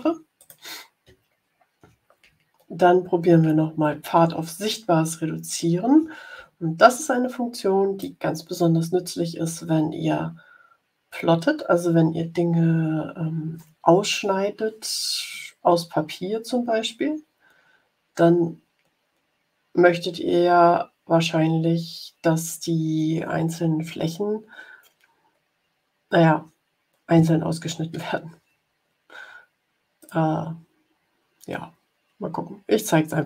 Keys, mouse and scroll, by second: 0.3 click, 1.1 ctrl+scroll down 2, 4.9-5.3 ctrl+scroll up 4, 6.8-8.1 drag, 29.9 click.